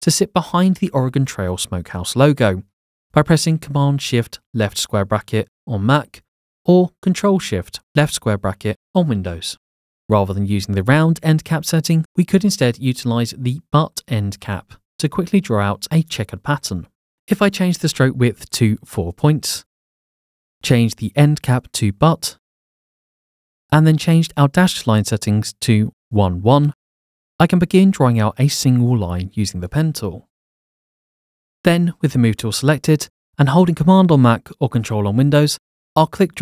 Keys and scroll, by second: 10.5 ctrl+w, 13.2 Escape, 18.1 4, 25.6 1, 25.7 Tab, 25.8 1, 25.9 Tab, 28.8 p, 29.6 p, 32.8 v.